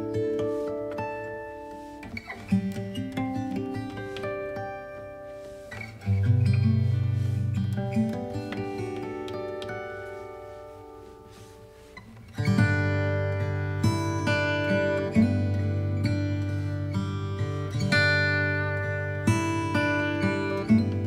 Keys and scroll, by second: 0.9 alt+space, 10.7 ctrl+i, 11.2 b, 14.9 space, 15.7 alt+space.